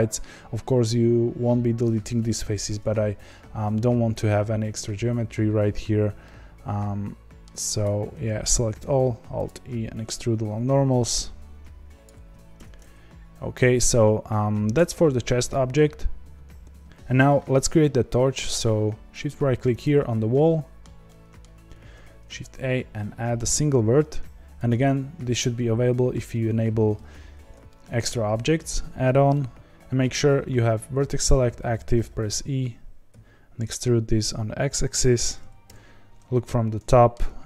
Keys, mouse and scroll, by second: 7.8 a, 9.4 alt+e, 12.5 Tab, 12.9-15.0 scroll down 2, 15.0-19.7 scroll down 1, 19.7-20.3 shift+right drag, 20.3-24.6 shift+middle drag, 24.6 shift+a, 27.3-27.6 scroll up 1, 27.6-29.5 shift+middle drag, 29.5-32.0 drag, 32.0 e, 35.6 KP_7, 36.4-36.8 scroll up 3, 36.8-37.4 shift+middle drag.